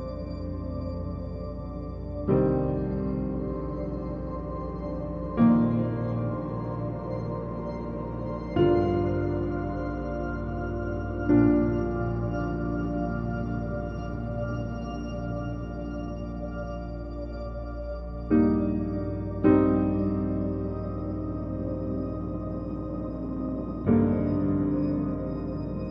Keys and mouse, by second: 1.0 g, 1.2 shift+middle click, 1.4 middle click, 1.5 g, 1.7 shift+middle click, 1.7 click, 2.1 click, 3.2 drag, 3.6 Tab, 3.6 g, 4.0 Tab, 4.0 g, 4.0 click, 4.6 shift+g, 4.7 shift+click, 5.3 click, 6.2 click, 6.4-12.5 typing, 7.2 Tab, 7.5 Tab, 7.6 Tab, 8.2 shift+click, 8.5 click, 9.0 alt+click, 9.5 click, 9.8 click, 10.1 click, 10.4 Tab, 10.5 Tab, 10.7 click, 12.1 click, 12.3 ctrl+z, 12.7 shift+middle click, 13.0 click, 13.1 shift+click, 13.3 shift+click, 13.5 e, 14.2 g, 14.7 click, 15.0 shift+click, 15.4 g, 16.1 click, 16.3 g, 16.6 click, 16.9 shift+click, 17.5 shift+click, 17.6 click, 17.7-24.9 typing, 17.9 click, 18.7 shift+click, 18.9 ctrl+z, 19.3 click, 19.6 alt+click, 21.0 Tab, 21.0 shift+middle click, 21.3 middle click, 21.6 click, 21.8 click, 22.2 shift+click, 22.2 shift+right click, 24.5 click, 24.9 click, 25.1 click, 25.3 click.